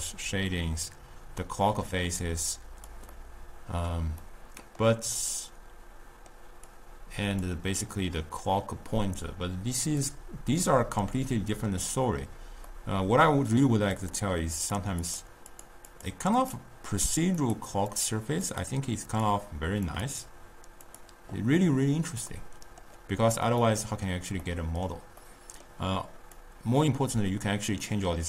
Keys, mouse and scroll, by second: 1.7-2.5 middle drag, 2.5 click, 3.4-6.7 middle drag, 6.7 click, 10.1-11.3 drag, 11.3-14.1 middle drag, 14.1 click, 14.7 click, 15.0 click, 15.5 click, 15.9 click, 16.4 click, 17.4 click, 18.0 click, 18.5 click, 19.2 drag, 20.1 click, 20.9 click, 22.3-26.4 middle drag, 26.4-28.2 drag.